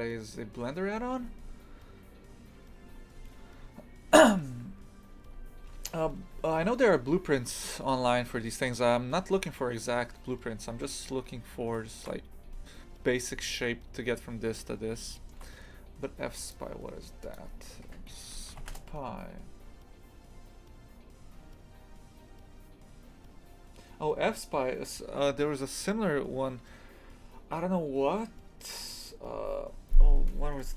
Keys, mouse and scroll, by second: 9.3 scroll down 1, 10.9-14.7 shift+middle drag, 14.9-18.0 shift+middle drag.